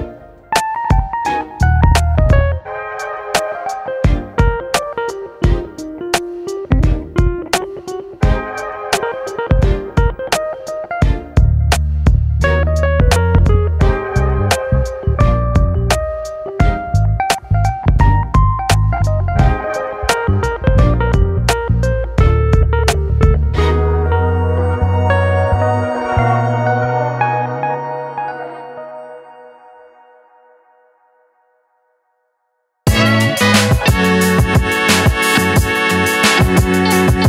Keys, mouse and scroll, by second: 0.8 scroll up 2, 2.8-3.9 drag, 6.0 click, 6.7 click, 7.6-9.0 drag, 9.0 middle click, 9.6 a, 10.0 scroll down 2, 10.2-11.3 middle drag, 11.3 s, 12.9-13.9 middle drag, 13.9-15.8 drag, 16.3-16.7 scroll down 2, 16.7-18.5 shift+middle drag, 18.5 click, 19.5 scroll up 2, 20.1-22.5 middle drag, 22.5 click, 23.7 click, 24.6 click, 28.7 middle click, 29.3-29.6 scroll up 1, 29.6-30.6 shift+middle drag, 30.6-31.3 scroll down 1, 31.3 click, 32.6-34.3 drag, 35.0-36.6 drag.